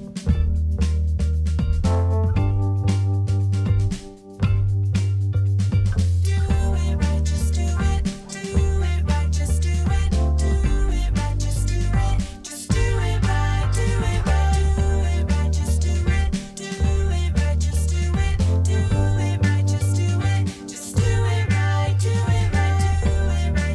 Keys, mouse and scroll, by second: 11.8 ctrl+z.